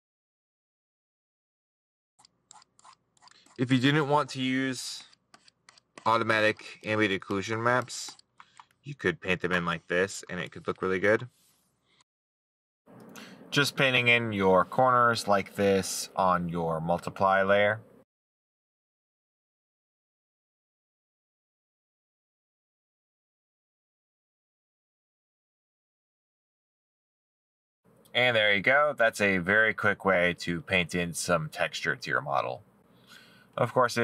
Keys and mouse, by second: 0.2 middle click, 0.6 middle click, 1.5 middle click, 1.6 right click, 7.7 middle click, 9.6 right click, 11.4 middle click, 19.8 right click, 20.2 middle click, 22.1 middle click, 22.5 middle click, 23.2 middle click, 27.4 middle click.